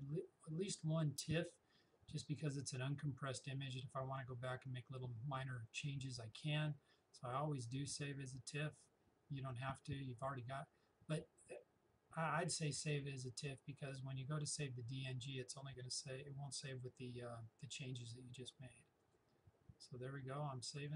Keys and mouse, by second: 19.0 click.